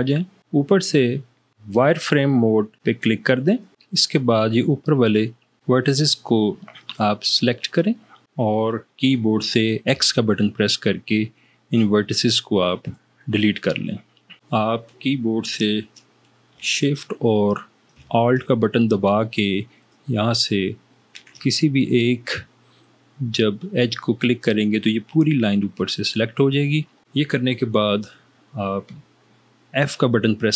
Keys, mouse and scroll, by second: 10.1 x.